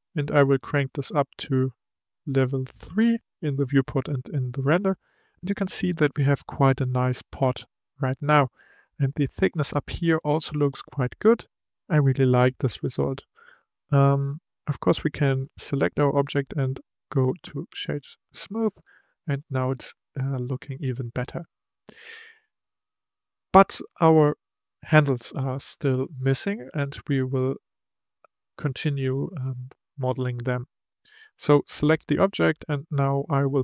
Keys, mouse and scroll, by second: 0.5-4.7 drag, 4.8-7.8 middle drag, 8.8-11.6 scroll up 3, 11.6 scroll down 4, 12.1-15.3 middle drag, 15.3 click, 16.1-18.7 right drag, 18.7 click, 19.1-22.3 middle drag, 24.6-27.6 middle drag, 30.4-31.4 middle drag, 31.4 click.